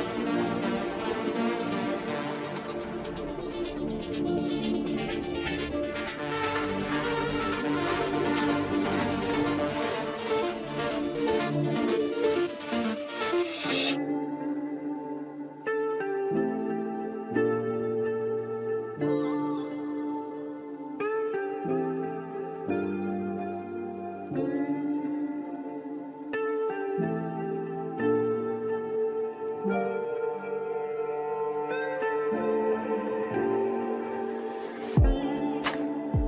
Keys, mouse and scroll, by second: 1.7-7.9 drag, 10.4 click, 26.1 KP_0.